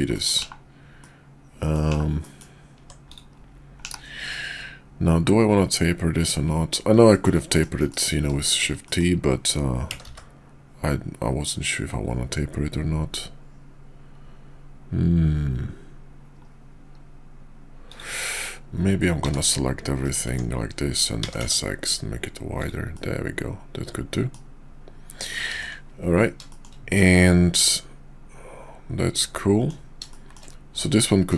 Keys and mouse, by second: 0.1 middle click, 0.4 /, 1.0-1.7 middle drag, 2.2 middle drag, 2.8 Tab, 3.1 click, 3.7 /, 4.3-6.7 middle drag, 7.5 middle click, 7.8 KP_5, 8.4 shift+middle click, 8.9 middle click, 9.8 s, 19.1 s, 20.3 Tab, 21.0 s, 22.9-24.4 middle drag, 25.4 shift+2, 27.0-29.7 middle drag, 30.8 middle click.